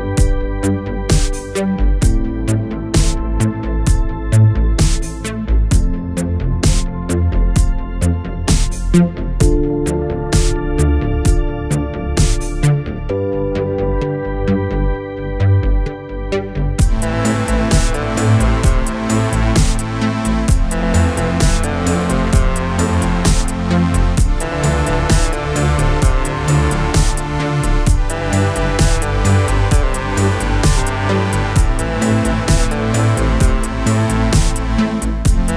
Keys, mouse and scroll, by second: 0.7 shift+click, 1.0-1.3 scroll down 2, 1.3 middle click, 2.2 scroll up 1, 2.5 middle click, 2.8-3.5 scroll up 1, 3.5 shift+click, 4.1 shift+click, 5.1-5.5 drag, 5.5 scroll down 2, 5.7 middle click, 6.4 alt+a, 6.9-7.9 shift+middle drag, 7.9-8.8 drag, 8.8-9.2 scroll down 2, 9.2-11.5 middle drag, 11.5 scroll up 1, 11.8-14.6 middle drag, 14.6 scroll down 2, 14.9-16.3 middle drag, 16.3 2, 17.1-19.0 middle drag, 19.0-19.5 scroll up 2, 19.5 middle click, 20.2 click, 20.5 scroll down 2, 20.7-22.2 middle drag, 22.2 shift+click, 23.1-23.4 drag, 23.4 middle click, 24.2 alt+a, 25.3 click, 26.0-26.4 scroll down 2, 26.4-27.5 middle drag, 27.5 scroll up 2, 28.9 3, 29.2 click, 30.2-30.8 drag, 30.8 scroll down 2, 31.0-33.1 middle drag, 33.1-33.6 scroll up 2, 33.6-34.9 middle drag, 34.9 Tab.